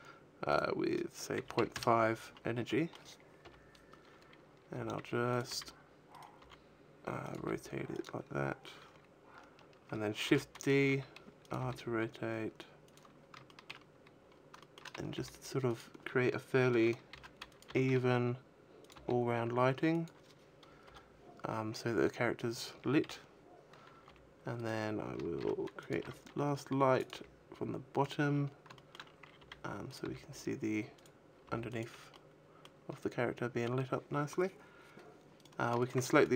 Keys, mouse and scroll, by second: 0.4 click, 2.5 middle click, 3.3 KP_7, 4.6 g, 5.2 click, 6.1 right click, 6.1 r, 6.3 r, 7.2 click, 7.2 g, 7.9 click, 10.1 shift+d, 10.5 click, 10.7 r, 11.4 click, 12.0 g, 12.8 click, 13.3 shift+middle click, 13.7-14.4 scroll down 5, 14.5 shift+middle click, 15.0 g, 15.6 click, 17.0 shift+d, 17.5 click, 17.5 r, 18.6 click, 18.6 g, 19.9 click, 20.7 KP_0, 21.3-21.9 scroll up 5, 22.9 KP_3, 23.5-24.4 scroll down 3, 23.9 r, 24.5 right click, 25.3 shift+d, 25.8 click, 26.1 r, 26.9 click, 27.1 g, 28.1 click, 28.1-28.5 scroll up 6, 28.6 shift+middle click, 28.9 scroll up 1, 29.3 r, 29.8 click, 30.4 g, 30.9 click, 31.3 g, 31.7 click, 32.0 middle click, 32.0 a, 35.3 right click, 35.7 shift+right click, 36.0 shift+right click.